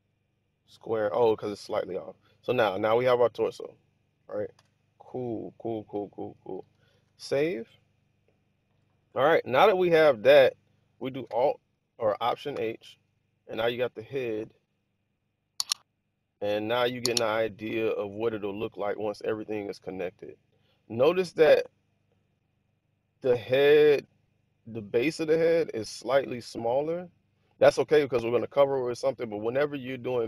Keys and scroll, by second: 4.7 1, 7.0 super+s, 12.5 alt+h.